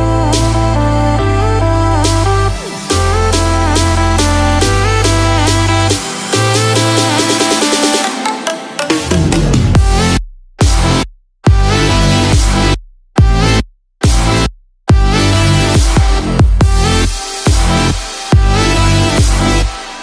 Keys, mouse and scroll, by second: 3.6 click, 7.0 scroll up 1, 7.8 middle click, 10.3 Tab, 11.2 scroll down 1, 12.1-12.8 scroll up 1, 13.0-13.6 scroll down 1, 13.6 middle click, 15.6 alt+z, 16.6-16.9 scroll down 1, 16.9-18.1 scroll up 1, 18.5 click.